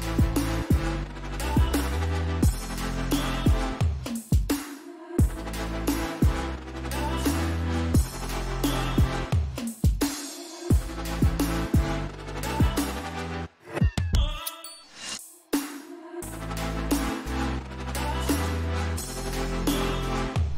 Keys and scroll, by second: 10.9 ctrl+t.